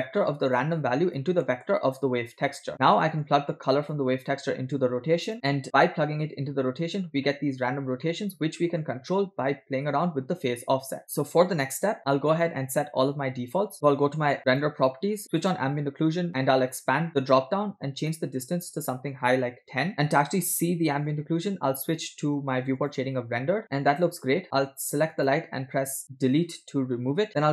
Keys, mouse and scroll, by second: 0.6 click, 1.5-1.8 middle drag, 2.5 click, 2.7 middle click, 3.9-5.3 drag, 8.0 middle click, 9.2 scroll up 2, 10.1 shift+click, 14.5 click, 15.7 click, 16.8 click, 18.0-19.9 drag, 23.5 click, 25.2 click, 26.8 Delete.